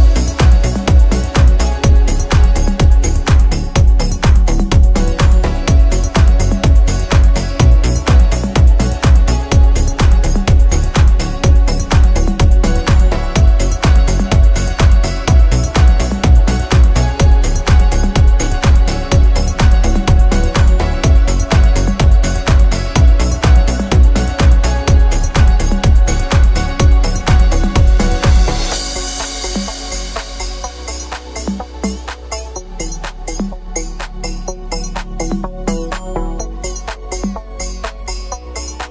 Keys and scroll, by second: 2.9 space, 3.7 h, 12.2-14.5 typing, 15.7 space, 16.3 shift+l, 18.4 space, 23.7 space, 25.2 Escape, 29.1 m, 30.4 space, 32.8 space, 32.9 Escape, 35.0 Delete.